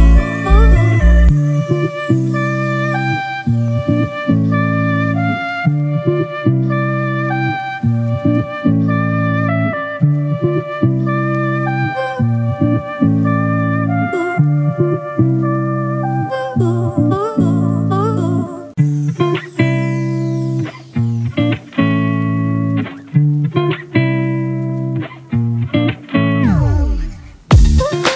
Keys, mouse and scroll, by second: 24.2 scroll up 1.